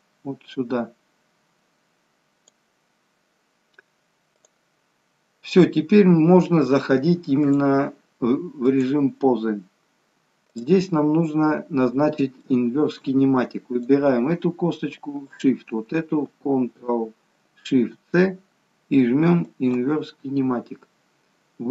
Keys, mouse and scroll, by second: 9.1 click, 9.6-10.4 scroll down 1, 10.4-11.0 scroll down 1, 11.0 click, 11.0-11.9 scroll up 1, 11.9-12.4 scroll up 1, 12.4 shift+middle click, 13.7 click, 15.2 shift+click, 17.8 ctrl+shift+c.